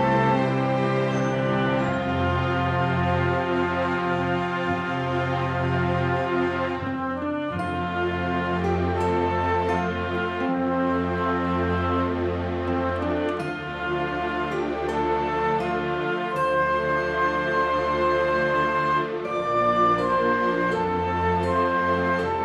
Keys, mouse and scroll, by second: 2.0 click, 2.0 middle click, 2.0 n, 2.7 scroll down 3, 2.8 shift+middle click, 2.9 scroll up 4, 3.0 middle click, 3.8 scroll down 1, 3.9 shift+middle click, 4.0 middle click, 4.2 click, 4.3 scroll down 2, 4.4 middle click, 4.7 scroll up 5, 4.9 alt+a, 5.0 scroll down 3, 5.0 scroll up 2, 5.1 middle click, 5.4 click, 5.7 click, 7.6-8.3 scroll up 6, 7.6 x, 7.7 middle click, 8.0 shift+middle click, 8.2 click, 8.3 scroll down 5, 8.6 middle click, 9.1 shift+middle click, 9.2 click, 9.8 click, 10.7 middle click, 11.7 click, 11.7-12.1 scroll down 4, 11.8 scroll up 3, 12.1 Tab, 12.2 middle click, 12.5 alt+z, 12.7 ctrl+right click, 13.3 x, 14.0 Tab, 14.0 alt+a, 14.0 scroll down 4, 14.1 scroll up 5, 14.2 click, 14.6 middle click, 15.0 alt+d, 16.0 click, 17.1 alt+a, 17.1 scroll down 3, 17.2 middle click, 17.4 scroll up 4, 17.5 middle click, 17.9 click, 18.0 middle click, 18.2 shift+middle click, 18.3 scroll up 2, 18.4 middle click, 18.6 scroll down 2, 18.7 shift+middle click, 18.8 scroll up 3, 18.9 middle click, 19.6 scroll down 1, 19.6 middle click, 19.9 click, 20.0 middle click, 20.2 Tab, 20.5 click, 20.5 middle click, 20.8 click, 21.4 click, 21.6 click, 22.1 click, 22.3 click.